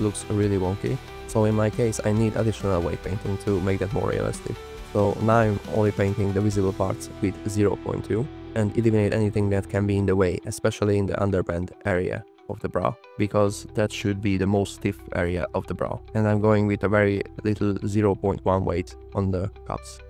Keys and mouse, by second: 4.8 shift+click, 5.4 click, 7.0 click, 9.4 f, 9.6 click, 9.9 click, 10.7 n, 11.2 f, 11.4 click, 12.9 click, 13.9 click, 14.3 click, 15.2 f, 15.3 click, 15.7 f, 15.8 click, 17.1 click, 17.4 click, 17.6 f, 17.6 click, 18.2 middle click, 19.3 click, 19.7 f, 19.7 click.